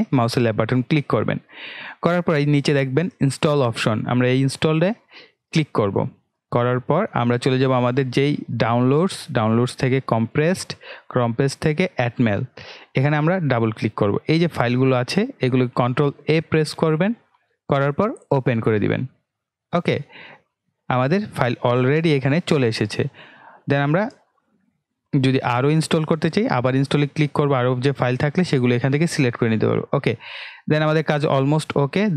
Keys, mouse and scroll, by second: 5.4 click, 8.5 click, 18.4 click, 23.7 click, 26.6 scroll down 1, 29.4 click.